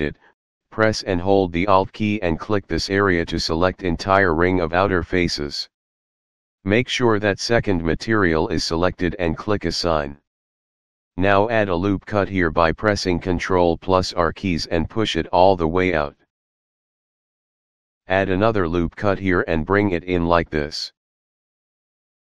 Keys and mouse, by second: 4.2 alt+click, 8.0 click, 12.1 ctrl+r, 14.6 click, 18.3 ctrl+r, 19.9 click, 20.7 click.